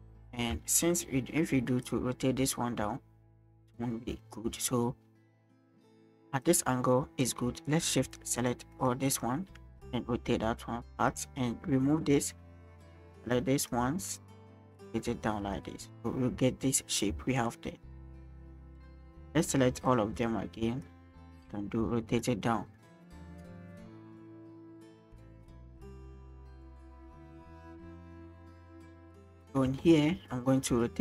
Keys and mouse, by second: 0.6 shift+middle click, 1.9 click, 5.9 shift+middle click, 6.4 click, 7.7 right click, 8.4 shift+click, 8.7 shift+click, 9.1 shift+click, 9.8 click, 13.2 shift+click, 13.6 shift+click, 14.2 click, 17.4 shift+click, 18.9 shift+click, 19.4 shift+click, 19.9 shift+click, 20.8 click, 22.8 middle click, 24.2-29.4 drag, 29.8 shift+middle click, 30.7 middle click.